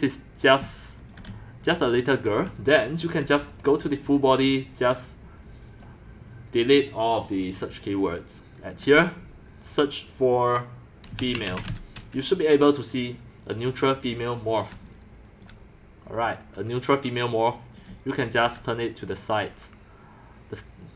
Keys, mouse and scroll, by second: 0.5 click, 0.6-3.3 typing, 1.1 click, 2.0 right drag, 2.2 click, 2.3 right click, 3.3 right click, 3.9 click, 6.0-11.1 drag, 10.9-12.0 typing, 13.8-16.6 typing, 15.5 click, 16.2 click, 17.9-18.6 c, 18.6 click, 19.6 BackSpace.